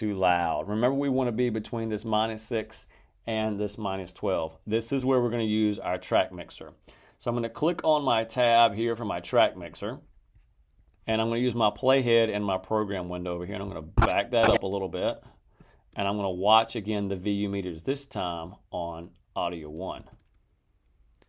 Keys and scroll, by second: 19.9 space.